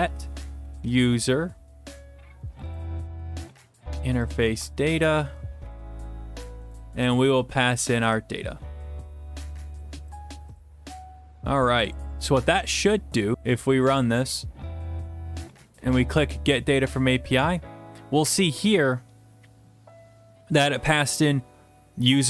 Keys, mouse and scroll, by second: 0.0-0.9 typing, 2.7 click, 3.8 ctrl+c, 4.3 click, 4.4 click, 4.5 ctrl+v, 5.6 (, 5.7 ), 6.9 Left, 7.6-8.0 typing, 10.2 click, 10.6 click, 11.9 click, 13.3 click, 13.4 click, 16.0 click, 18.1-19.7 scroll down 13, 21.8-22.2 scroll down 1.